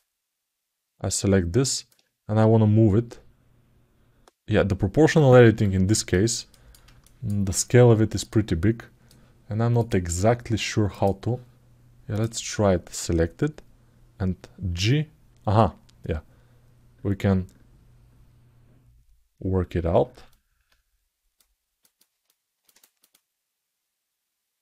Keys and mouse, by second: 0.9 alt+middle click, 5.8 ctrl+alt+middle click, 6.3 ctrl+alt+middle click, 6.8 alt+shift+middle click, 9.6 click, 10.7 click, 11.9 click, 22.0 ctrl+alt+middle click, 22.5-24.6 alt+shift+middle drag.